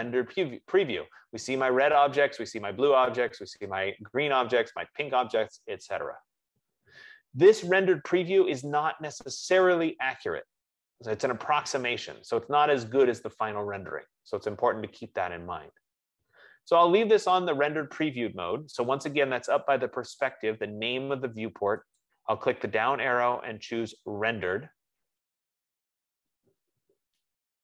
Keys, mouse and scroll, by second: 22.8-27.6 drag.